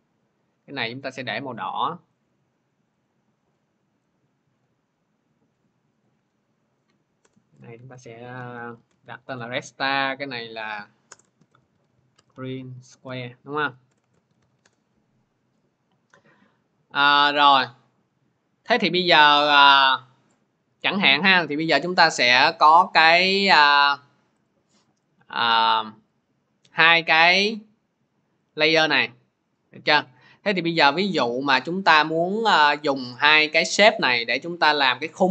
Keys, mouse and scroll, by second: 2.2 click, 2.9 click, 4.4 click, 5.9 click, 7.0 Return, 7.6-9.4 typing, 10.4 click, 10.9 Return, 11.2-14.7 typing, 18.4-19.2 typing, 19.1 click, 24.1-26.9 drag, 28.4 click, 30.0 click, 30.7 click, 33.5 click.